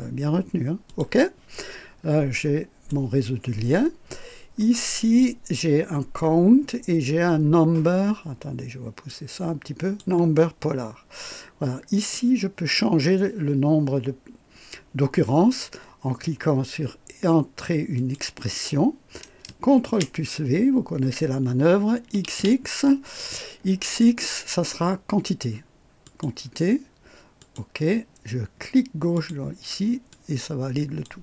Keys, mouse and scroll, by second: 0.9 click, 1.6-2.1 scroll down 1, 2.3-3.1 right drag, 4.1-4.4 scroll down 2, 5.8-6.1 scroll down 2, 9.1 click, 11.9 click, 17.9 click, 19.8 ctrl+v, 22.1 x, 26.0 click, 27.4 click, 29.1 click, 30.1 click.